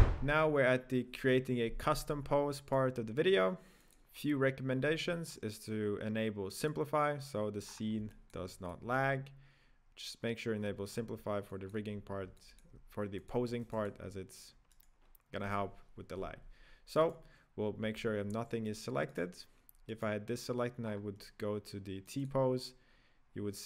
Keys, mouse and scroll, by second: 0.1 KP_1, 0.2-0.5 scroll up 5, 2.7 right click, 3.7 click, 4.7-6.7 scroll down 7, 6.7 click, 7.6 scroll up 7, 7.8 middle click, 8.1-10.5 shift+middle drag, 10.5-11.0 scroll down 7, 11.5-13.1 shift+middle drag, 13.1-14.7 drag, 14.7 right click, 17.0 right click, 17.8 g, 18.6 right click, 20.1 right click, 20.8-22.0 scroll up 5, 22.0 click, 22.4 click.